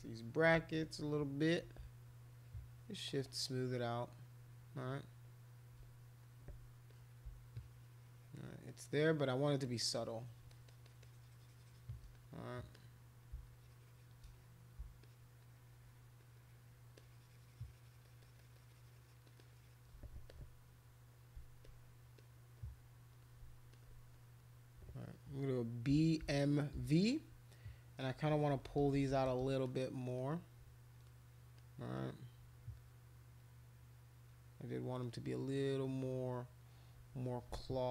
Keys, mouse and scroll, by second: 1.1 click, 1.9-3.0 shift+drag, 3.0 shift+click, 3.2-4.9 shift+drag, 5.2 shift+click, 5.9 click, 6.9 click, 7.5-8.6 shift+drag, 8.7 shift+click, 8.8 shift+click, 9.6 shift+click, 9.9 shift+click, 10.0 shift+click, 10.1 shift+click, 10.5 shift+click, 10.7 shift+click, 10.8 shift+click, 11.0 shift+click, 12.2 click, 12.7 click, 13.5 shift+click, 14.4 click, 15.0 shift+click, 15.4 shift+click, 16.2 shift+click, 16.3 shift+click, 16.5 shift+click, 16.9 shift+click, 17.9 shift+click, 18.4 shift+click, 18.5 shift+click, 19.2 shift+click, 19.4 shift+click, 19.5 shift+click, 21.6 click, 22.2 click, 23.7 alt+click, 25.9 b, 26.2 m, 26.7 v, 28.5-29.4 typing, 29.7 click, 30.2 click, 31.6 click, 32.0 click, 33.4 click, 35.0-36.3 drag.